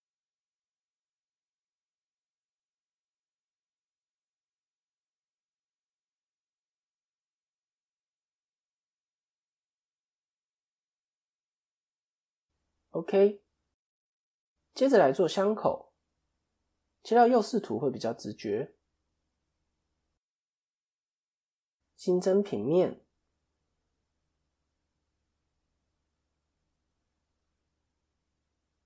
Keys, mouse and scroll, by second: 2.3 click, 3.4 scroll up 4, 3.8 shift+middle click, 4.3-5.0 scroll up 1, 5.0 click, 5.0-6.1 scroll up 1, 8.2 scroll down 3, 9.1 scroll down 9, 9.2 ctrl+KP_3, 10.1 click, 10.4-11.5 scroll up 1, 11.5 scroll up 3, 11.7 click, 15.3 shift+middle click, 15.8-16.8 scroll up 1, 16.8 KP_3, 17.9 shift+middle click, 21.6 click, 22.6 shift+a, 26.2 click.